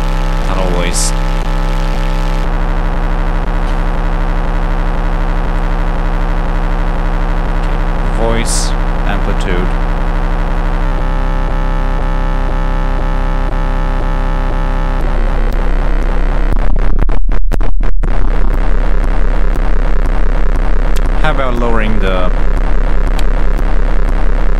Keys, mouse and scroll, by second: 0.6 click, 3.4 click, 6.0 click, 10.1 click, 10.7 click, 12.6 click, 13.6 click, 15.0 click, 15.9 click, 23.3 click, 24.0 click.